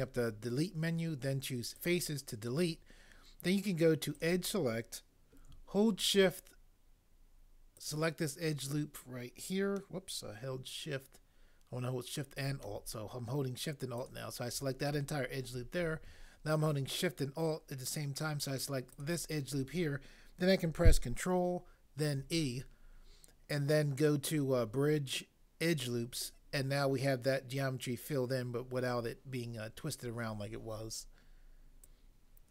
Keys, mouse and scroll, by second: 22.2 ctrl+e.